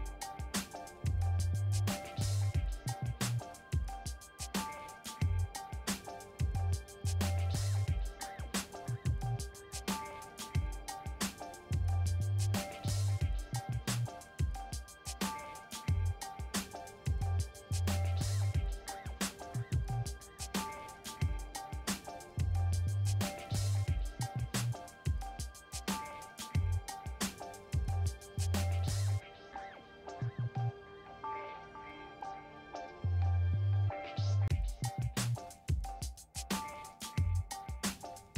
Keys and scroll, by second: 3.6 ctrl+z.